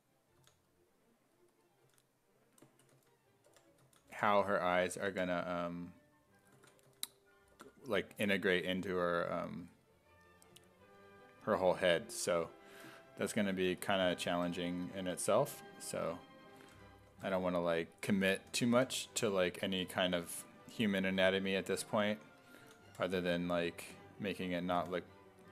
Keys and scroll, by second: 0.4 s, 1.9 s, 2.9-5.1 typing, 6.9 s, 7.6 5, 8.1 s, 9.6 s, 10.5 s, 11.7 s, 13.6 1, 14.3 1, 15.2 1, 16.6 1, 17.1 1, 18.3-19.3 typing, 21.2 1, 22.6 s, 22.9 5, 24.8 4.